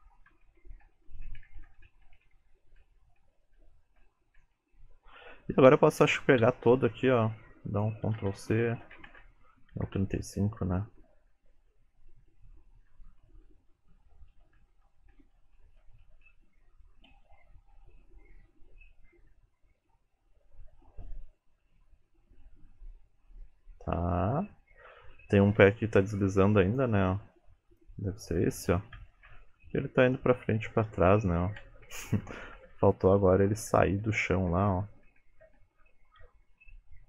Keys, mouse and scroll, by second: 0.0 Right, 0.3 Right, 0.7 Right, 0.9 Right, 1.1 Right, 1.3 Right, 1.5 Right, 1.7 Right, 1.9 Right, 2.1 Right, 2.3 Right, 2.9 Right, 3.3 Right, 3.6 Right, 4.1 Right, 4.4 Right, 6.5 a, 7.8 click, 8.2 ctrl+c, 8.9 Right, 9.1 Right, 9.8 ctrl+v, 10.4 Left, 10.7 Left, 10.9 Left, 11.1 Left, 11.2 Left, 11.5 Left, 11.6 Left, 11.8 Left, 12.0 Left, 12.3 Left, 12.5 Left, 12.8 Left, 13.1 Left, 13.3 Right, 13.5 Right, 13.8 Right, 14.0 Right, 14.4 Right, 14.6 Right, 14.9 Right, 15.2 Right, 15.4 Right, 15.6 Right, 15.9 Right, 16.1 Right, 16.3 Right, 17.2 space, 24.8 space, 26.3 click, 27.8 click, 29.0 Left, 29.4-30.5 Right, 30.5-31.7 Left, 31.7 Right, 31.9 Right, 32.1 Right, 32.3 Right, 32.5 Left, 32.8 Left, 33.2 Left, 33.7 Right, 34.1 Right, 34.5 Right, 34.8 Right, 35.2 Right, 35.5 Right, 36.7 shift+middle click.